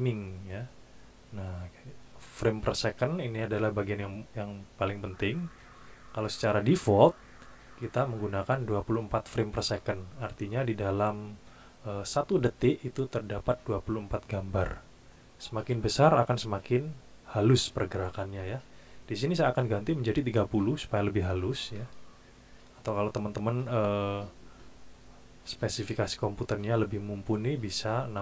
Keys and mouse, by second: 19.8 click, 21.1 KP_3, 21.5 KP_0, 21.8 KP_Enter.